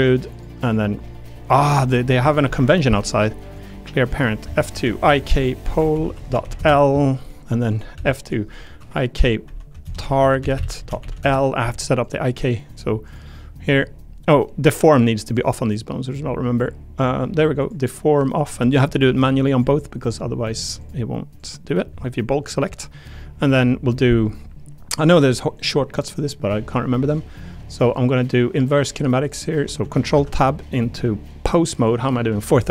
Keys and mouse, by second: 0.6 click, 2.4 alt+p, 4.1 click, 4.4 F2, 7.9 F2, 12.0 click, 15.2 click, 17.0 click, 17.6 click, 18.6 click, 20.4 click, 20.8 click, 26.2-29.0 drag, 29.1 click, 30.1 ctrl+Tab.